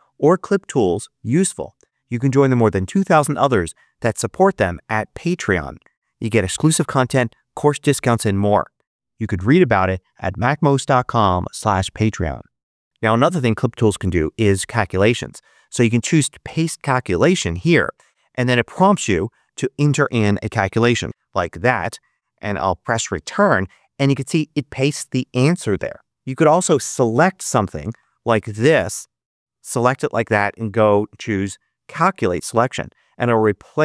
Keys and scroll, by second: 21.0 3, 23.2 Return, 27.2-28.8 typing.